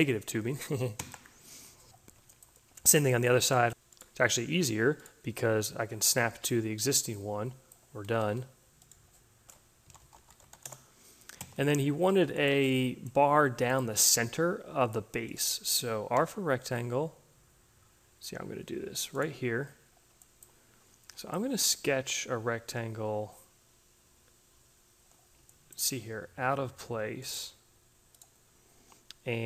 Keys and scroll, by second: 0.8 Return, 7.6 e, 9.6-10.9 typing, 15.6 r.